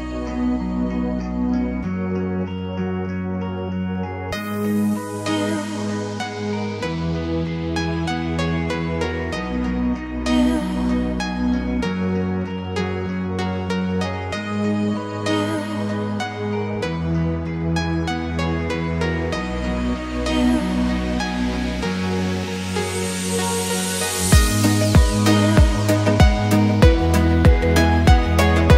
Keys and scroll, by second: 8.5 Escape.